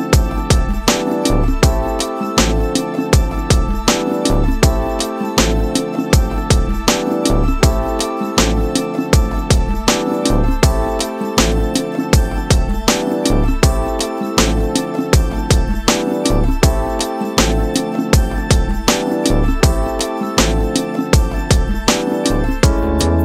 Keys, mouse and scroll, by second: 0.7 click, 1.9 click, 4.9 click, 5.4-5.8 scroll up 2, 6.3-7.5 shift+middle drag, 7.5-8.0 scroll down 1, 8.6 click, 10.6-13.8 drag, 14.5 click, 16.0 click, 16.7-20.0 drag, 20.0 scroll down 2, 20.6-21.9 shift+middle drag, 21.9 click.